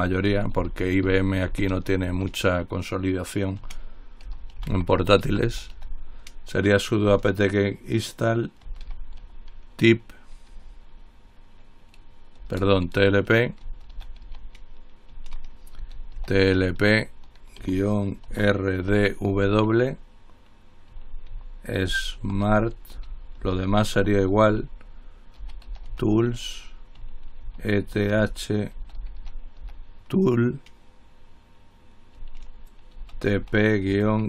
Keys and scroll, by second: 0.0-2.8 typing, 4.2-6.4 typing, 8.6-9.5 typing, 10.7 typing, 12.6-14.5 typing, 15.7-19.5 typing, 21.5-30.3 typing, 33.2-34.2 typing.